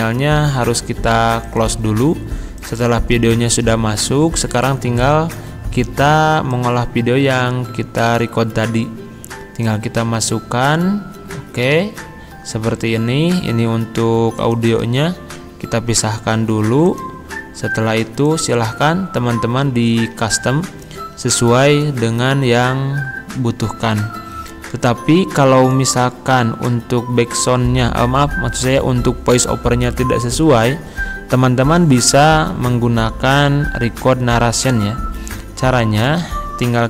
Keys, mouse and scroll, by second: 1.5 click, 6.5 click, 9.6 click, 14.4 click, 14.7 right click, 16.9 click, 25.7 click, 36.0 click.